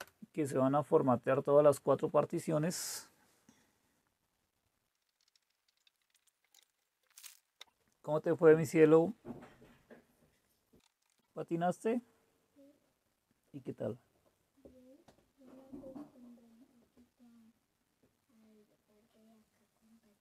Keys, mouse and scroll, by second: 0.0 Return.